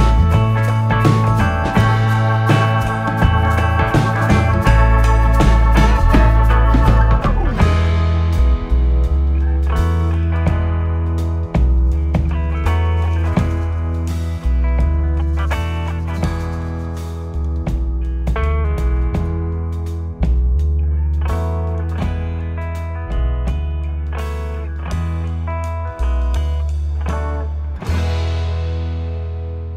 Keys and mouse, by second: 0.7 click, 2.5 KP_0, 5.9 click, 8.3 s, 12.6 click, 15.9 g, 18.2 click, 20.1 s, 22.0 click, 22.6 middle click, 27.1 z, 27.6 click, 28.4 middle click.